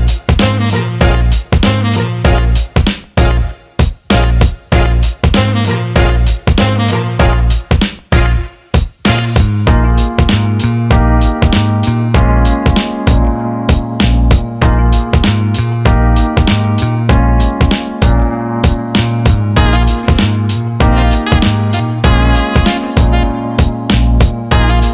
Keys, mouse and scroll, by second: 7.9 drag, 9.2 click, 17.1 click, 18.2 alt+middle click, 19.4 alt+middle click, 21.1 click, 23.4 click, 24.2-24.7 alt+middle drag.